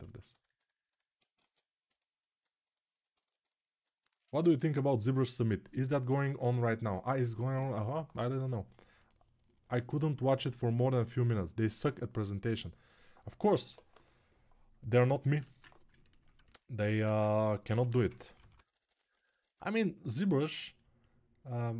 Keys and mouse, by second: 14.7-19.4 middle drag, 15.2 ctrl+Tab, 16.7 alt+q, 17.4 g, 17.8 ], 18.1-19.4 ], 19.4-21.7 drag.